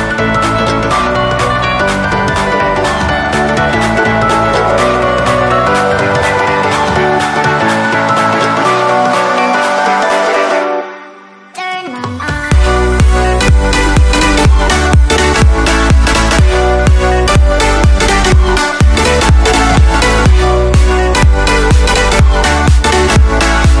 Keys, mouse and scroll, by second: 1.2 middle click, 1.8-3.7 drag, 3.7-5.6 middle drag, 4.3-6.3 drag, 6.1-7.8 middle drag, 6.8 ctrl+z, 7.8-8.9 drag, 9.0 middle click, 9.1 click, 9.8 b, 10.4 click, 10.4 b, 11.3 b, 12.1 b, 13.0 middle click, 13.9-16.1 drag, 16.1-17.4 middle drag, 16.4 Tab, 17.6 a, 18.8 Tab, 18.8 click, 18.8 right click, 19.3 a, 19.5 right click, 19.7 s, 20.3 s, 20.6-21.6 right drag, 21.5-22.7 drag, 22.7 a, 22.7 right click, 23.0 middle click, 23.5-23.8 drag, 23.7 a.